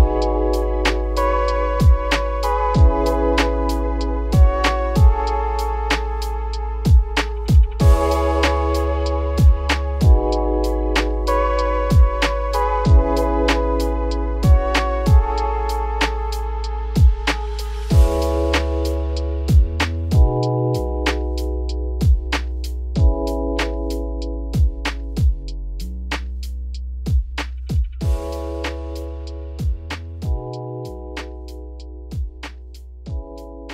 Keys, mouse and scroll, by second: 0.8-1.4 drag, 2.0-2.4 middle drag, 2.4-3.0 scroll up 3, 3.0 ctrl+z, 3.2 ctrl+z, 3.6 ctrl+z, 4.1 ctrl+z, 4.5 shift+middle drag, 4.7-5.5 scroll up 3, 5.5 click, 5.8-6.6 middle drag, 6.6 click, 7.1 g, 10.2 g, 12.3 x, 13.0-13.3 shift+middle drag, 13.3 click, 14.6 click, 16.3 click, 16.9 ctrl+z, 17.1 ctrl+z, 17.6 ctrl+z, 18.0 ctrl+z, 18.7 click, 20.2 click, 21.7 click, 22.1 click, 22.5 g, 26.5 g, 27.8 `, 28.2 z, 28.7-29.9 scroll up 5, 28.9 shift+middle drag, 29.9 g, 33.4-33.7 scroll down 1.